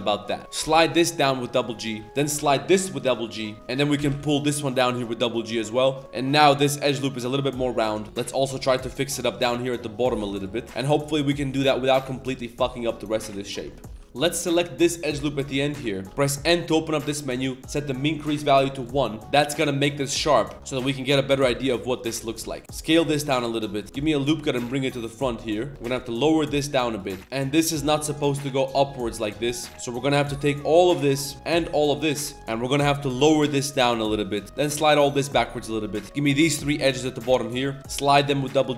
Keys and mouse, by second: 0.1 click, 0.4 ctrl+z, 0.6 g, 1.8 click, 2.0 z, 2.0 click, 2.0 z, 3.4 click, 3.6 middle click, 5.6 middle click, 6.0 middle click, 6.6 middle click, 7.6 middle click, 8.0 middle click, 8.0 z, 8.0 g, 8.2 click, 10.5 click, 10.6 Tab, 10.7 middle click, 10.8 click, 11.0 Tab, 11.1-11.6 middle drag, 11.8-12.2 middle drag, 12.3 middle click, 12.7 shift+middle drag, 13.5 alt+click, 13.7 middle click, 15.4 n, 17.9 click, 17.9 n, 19.5-20.3 middle drag, 20.5 Tab, 20.5 KP_7, 20.5 z, 20.8 z, 21.0 shift+middle click, 21.2 Tab, 21.5 shift+middle click, 22.2 alt+click, 22.4 shift+s, 23.3 g, 23.8 ctrl+r, 23.8 ctrl+z, 25.7 Tab, 25.7 1, 25.7 z, 25.7 a, 25.7 b, 27.0 click, 27.0 g, 27.2 z, 28.5 middle click, 29.5 middle click, 29.7 z, 30.0 click, 31.6 ctrl+click, 31.8 middle click, 32.1 middle click, 32.4 middle click, 32.8 middle click, 33.0 g, 34.4 ctrl+z, 34.4 2, 34.4 1, 35.6 middle click, 35.8-38.7 typing, 36.0 middle click, 36.0 click, 37.0 click, 37.4 click.